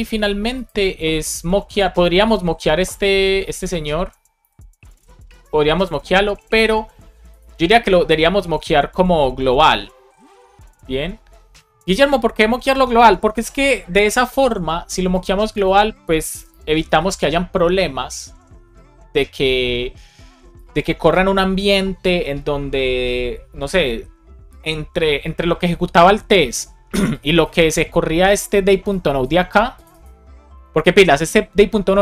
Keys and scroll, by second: 3.7 super+Right, 4.4 shift+super+Left, 4.8 super+c, 16.3 Return, 16.8 super+v, 17.6 super+s.